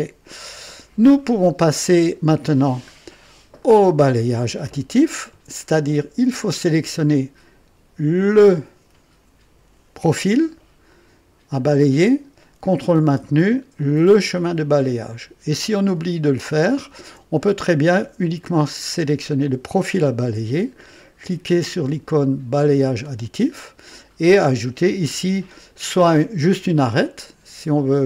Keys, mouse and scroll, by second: 0.9 scroll down 1, 1.4-2.3 right drag, 2.8 scroll up 1, 3.5-4.3 right drag, 8.1 click, 14.2 ctrl+click, 16.3 ctrl+click, 22.6 click.